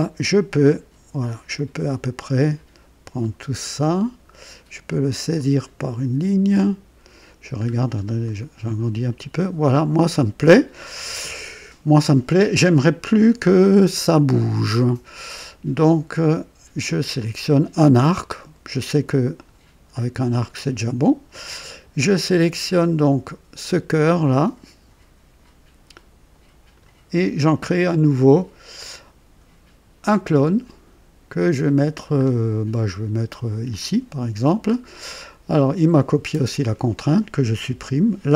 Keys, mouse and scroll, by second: 5.3-7.3 drag, 7.7-8.0 scroll up 1, 8.2-9.3 right drag, 16.8 click, 19.3 click, 24.2-26.9 drag, 30.3 click, 32.2-32.5 scroll down 2, 33.6 click, 34.7 scroll up 2, 36.4 click, 37.7 Delete.